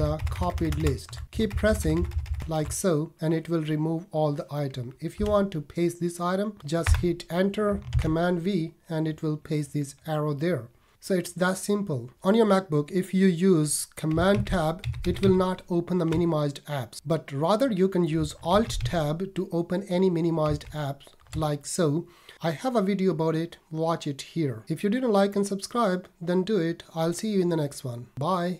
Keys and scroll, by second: 5.2 Down, 7.9 super+v, 14.3 super+Tab, 18.5 alt+Tab.